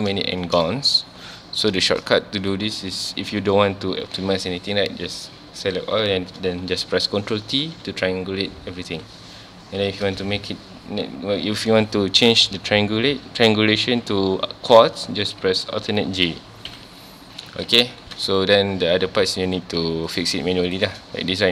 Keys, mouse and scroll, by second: 0.3-0.9 shift+scroll up 2, 0.4 shift+middle click, 1.8 shift+middle click, 2.0-2.6 scroll up 1, 2.6-2.9 scroll down 1, 7.3 ctrl+t, 9.0 alt+a, 9.7 a, 16.7 alt+j, 17.5 alt+a, 17.8 ctrl+s, 18.3 scroll up 1, 19.7 2, 19.9 1, 20.1 click, 20.7 shift+click.